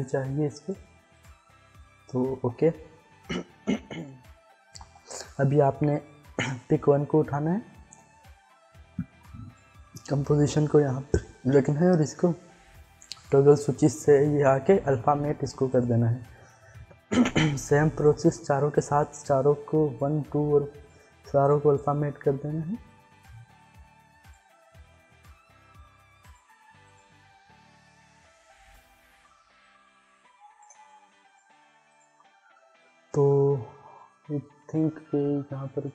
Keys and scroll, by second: 2.3 ctrl+s.